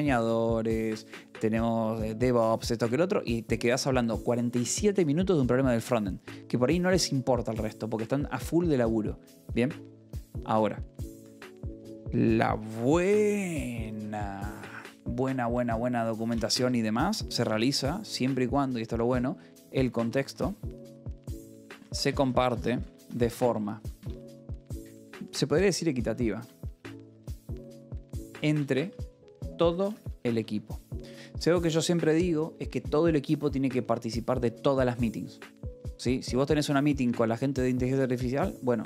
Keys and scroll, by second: 14.3 j, 16.5 Escape, 16.9 o, 17.2 e, 17.4 space, 19.0-31.9 typing, 33.2 shift+v, 33.3 Escape.